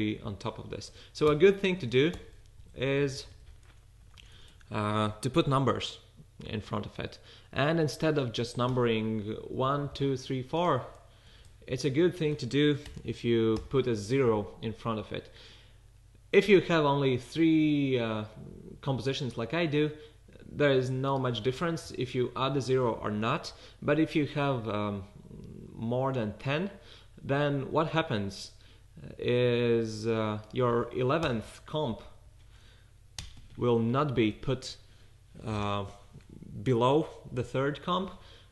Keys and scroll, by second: 2.6 fn+Left, 2.9 Right, 3.0 Right, 3.2 Right, 3.3 Right, 3.9-4.5 typing, 8.7 1, 11.6 fn+Left, 12.0 Right, 12.9 typing, 22.3 fn+Left, 22.5 Right, 23.1 BackSpace, 32.0 fn+Left, 32.3 Right, 33.2-33.5 typing.